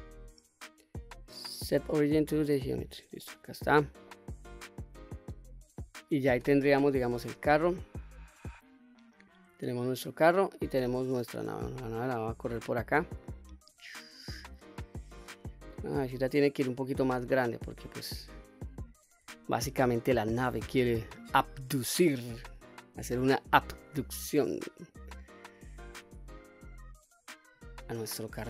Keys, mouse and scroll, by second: 2.9-3.5 middle drag, 3.8-4.9 middle drag, 5.2-6.4 scroll down 1, 6.6 alt+h, 9.7 click, 10.3-11.5 scroll down 2, 12.4-13.4 drag, 13.9-14.3 middle drag, 15.5-16.2 drag, 16.5-17.0 scroll down 1, 17.0-17.6 middle drag, 17.6-18.7 scroll down 1, 19.1 shift+scroll down 1, 19.2-19.7 shift+middle drag, 19.9-20.3 scroll down 1, 20.3-20.8 middle drag, 22.0-22.7 shift+middle drag, 23.5 s, 25.1 click, 25.7 s, 27.3 click, 27.7-28.4 middle drag.